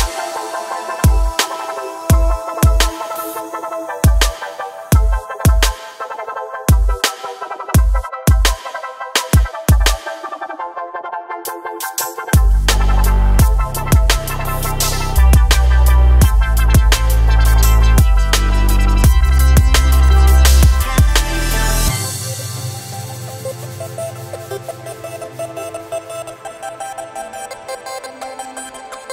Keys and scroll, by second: 8.5 e, 8.9 Escape, 11.7 s, 17.0 g, 17.6 z, 19.8 KP_1, 27.4 e, 28.7 Escape.